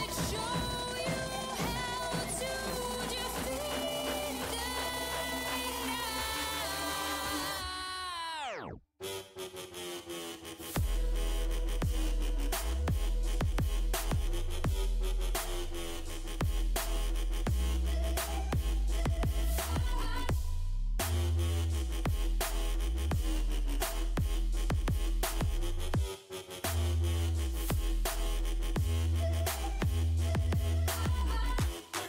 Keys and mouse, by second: 0.5 c, 1.7 z, 4.3 ctrl+e, 8.8 g, 9.7 g, 10.9 click, 10.9 g, 11.9 g, 12.9 g, 14.0-17.4 drag, 15.0 g, 15.9 g, 17.4 g, 19.0 g, 22.5 g, 23.7 g, 26.7-27.8 right drag, 27.8 z, 28.6 c, 31.2-32.0 drag.